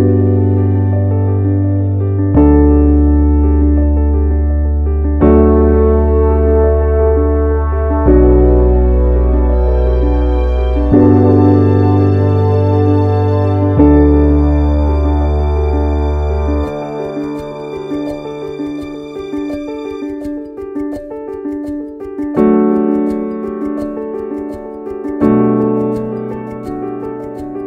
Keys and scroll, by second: 22.3 ctrl+c.